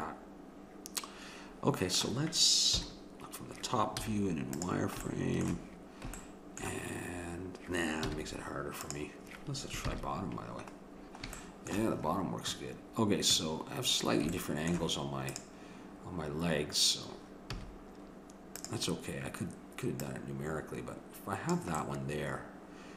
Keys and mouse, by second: 2.8 KP_7, 4.0 z, 10.9-13.3 middle drag, 13.9 middle click, 15.3-17.2 drag, 17.5 a, 18.6-21.8 drag, 21.8-22.9 middle drag.